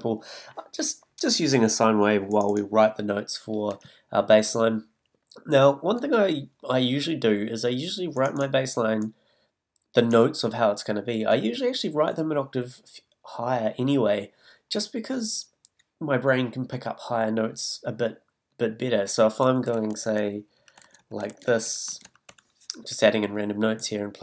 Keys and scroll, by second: 20.0 super+d, 20.4 super+Up, 20.7 super+Up, 20.8 super+d, 21.0 super+Up, 21.3 super+d, 21.5 super+Up, 21.9 super+Up, 22.0 super+d, 22.0 super+Up.